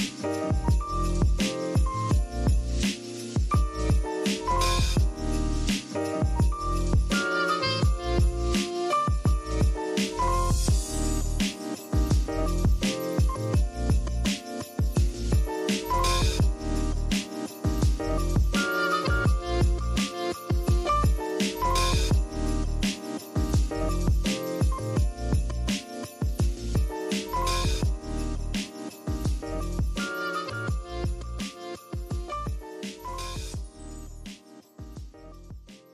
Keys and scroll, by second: 2.5 z, 2.9 v, 4.1 super+z, 5.6-6.4 typing, 7.5 super+z, 7.6-8.3 typing, 10.1 x, 11.6 super+z, 11.7 super+z, 12.8-13.6 typing, 14.8 m, 15.5 v, 16.9 super+z, 17.2 v, 17.4 super+x, 17.6 super+z, 18.1 shift+super+}, 18.4 x, 19.1 a, 20.3 v, 20.5 BackSpace, 24.5-25.5 typing, 28.0 super+z, 28.6-29.7 typing, 31.5 z, 32.1 v.